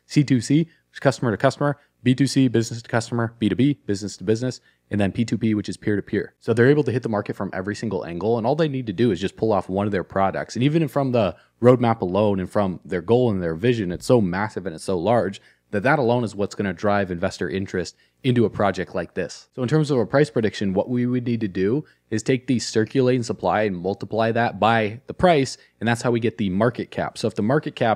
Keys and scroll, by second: 6.3 alt+q.